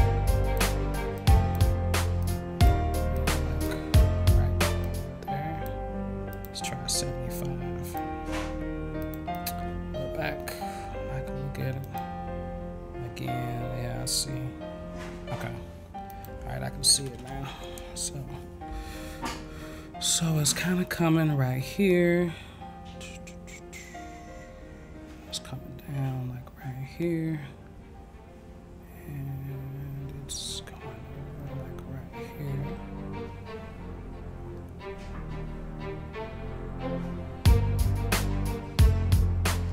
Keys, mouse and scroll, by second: 1.1 click, 2.2 click, 3.1 click, 3.9 click, 4.8 click, 6.3 click, 7.8 click, 9.0 click, 9.3 click, 11.8 click, 16.1 click, 22.1-39.6 drag.